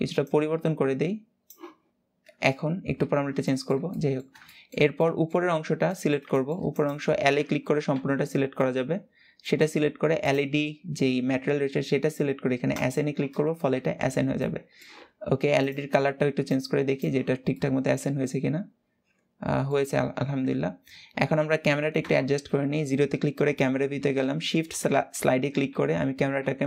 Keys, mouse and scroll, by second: 1.7-2.2 scroll down 2, 2.2 Tab, 2.7 Tab, 3.1-5.3 shift+middle drag, 5.3-5.6 scroll down 1, 5.6 middle click, 6.4 click, 8.3-9.9 middle drag, 9.9 click, 12.6 click, 13.3 scroll down 1, 13.4 Tab, 14.1-16.1 middle drag, 16.1 click, 16.9 scroll down 2, 17.2-19.6 middle drag, 19.6 ctrl+s, 20.3 scroll up 1, 20.6-21.7 scroll down 1, 21.7 KP_0, 23.7 shift+`.